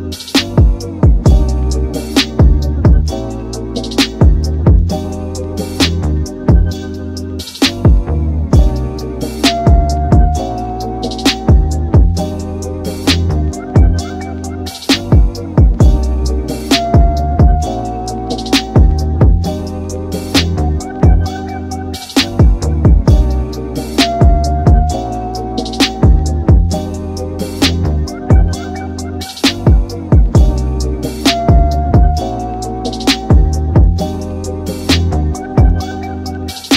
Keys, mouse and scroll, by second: 0.4 c, 5.6-7.9 middle drag, 7.9-8.9 drag, 8.9 middle click, 9.8 a, 9.9 a, 10.4 Tab, 11.3-12.6 middle drag, 12.6 scroll up 2, 13.0-13.5 scroll down 2, 14.1 click, 14.5-15.0 scroll down 8, 18.6 click, 19.1-20.4 scroll down 2, 20.4-23.3 drag, 23.3-25.4 middle drag, 25.4-29.5 drag, 29.5-31.2 scroll down 4, 31.2 click, 33.8-35.0 middle drag, 35.0-35.6 scroll up 2, 35.6 alt+z, 36.0-36.7 scroll down 2.